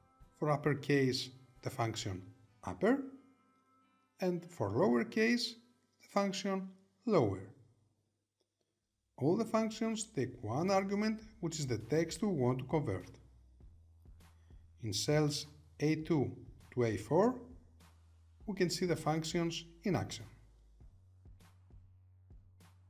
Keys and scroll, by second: 7.8 Return, 14.8 Tab, 18.5 Return.